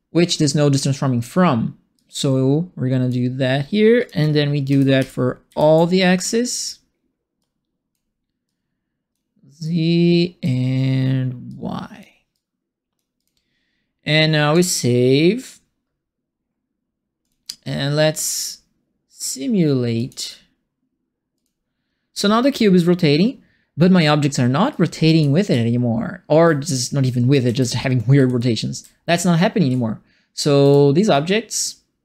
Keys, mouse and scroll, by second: 1.9-3.0 drag, 3.9 click, 4.6 ctrl+c, 4.9 ctrl+v, 5.4 ctrl+v, 6.2 click, 7.3 click, 8.4 click, 9.6 click, 11.4 click, 12.3 click, 13.1 click, 14.5 click, 17.2 click, 19.9 click, 21.3 click, 24.7-32.0 right drag, 24.7-26.0 typing, 27.0-29.6 typing, 31.1 s.